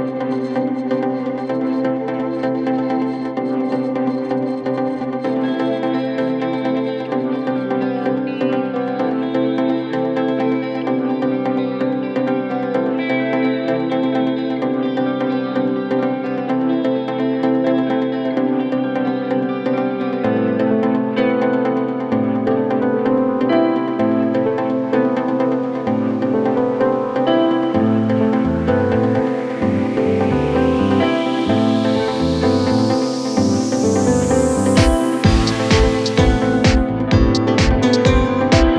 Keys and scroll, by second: 0.8 KP_Add, 9.7 KP_Add, 33.7 e.